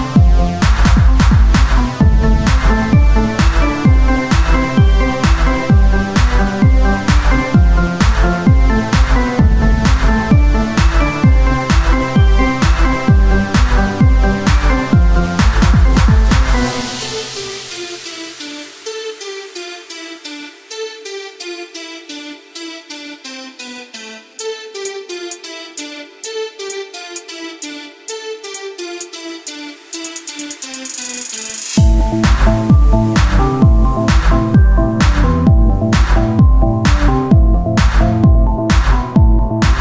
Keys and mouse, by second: 1.7 ctrl+Tab, 2.2 click, 2.9 click, 5.1 Tab, 6.7 KP_1, 7.3 z, 9.6 shift+a, 12.1-14.3 drag, 14.4 middle click, 14.9 s, 15.4 z, 15.6-17.4 middle drag, 15.6 s, 17.4-18.4 drag, 18.4 s, 19.2 z, 20.6 s, 23.2-27.0 drag, 28.4-29.9 right drag, 29.9-32.1 drag, 32.5-34.9 drag, 34.9 r, 37.7 click, 38.3 KP_1, 38.7 z.